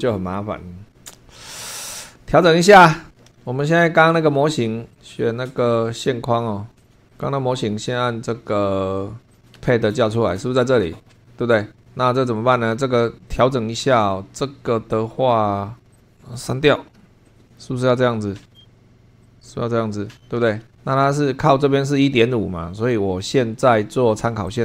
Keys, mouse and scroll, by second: 4.9 click, 6.8 click, 7.1 click, 9.3 click, 9.5 space, 15.9 click, 16.9 Delete, 17.2-18.6 drag, 19.2-20.3 drag, 24.5 click.